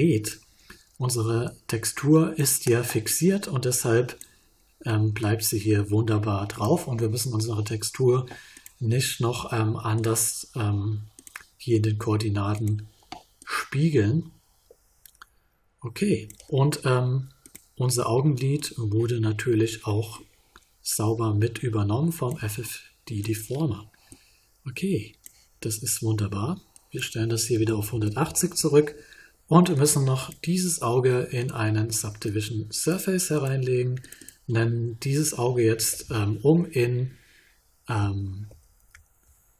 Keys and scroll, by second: 27.5 1, 28.2 Return, 38.4 shift+-.